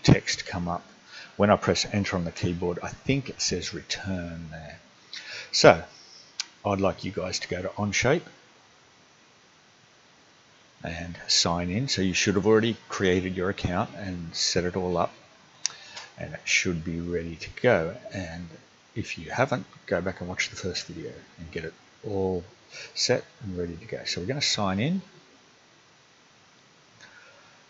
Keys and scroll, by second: 2.3 Return.